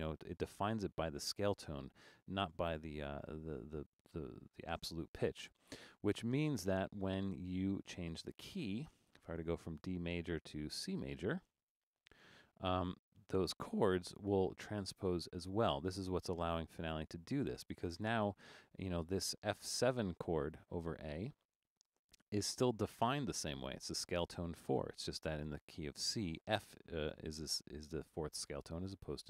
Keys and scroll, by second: 21.9 Return.